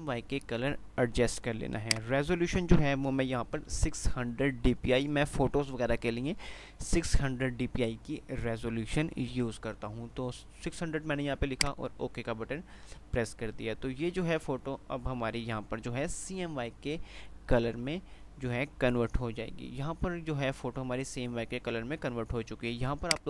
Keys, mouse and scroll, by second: 16.6 typing.